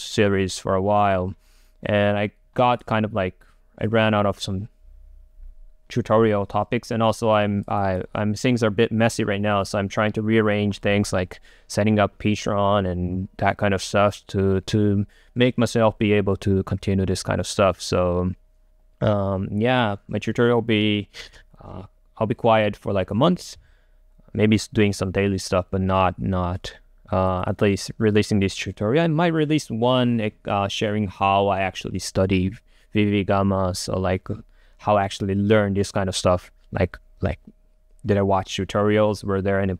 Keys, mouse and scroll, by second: 21.5-24.3 drag, 26.8-30.8 drag.